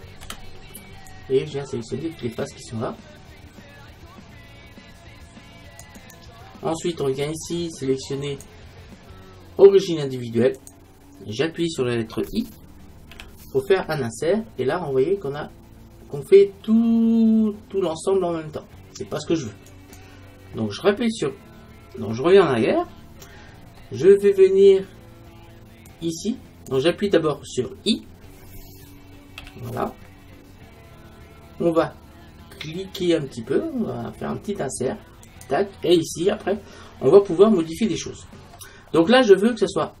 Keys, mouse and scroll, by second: 0.3 c, 6.2-8.0 right drag, 8.3-10.3 drag, 23.0-24.7 middle drag, 25.9-27.7 drag, 35.5-38.2 drag, 38.2-40.0 middle drag.